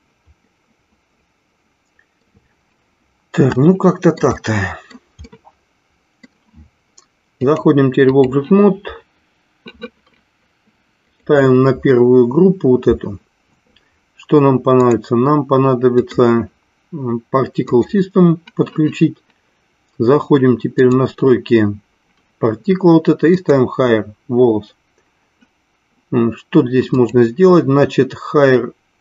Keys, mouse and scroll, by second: 0.6-2.3 middle drag, 3.6 shift+middle click, 4.4 middle click, 5.3-6.4 middle drag, 7.4 click, 14.8 click, 15.8-18.0 drag, 20.7 click, 23.7 click, 27.0-29.0 drag.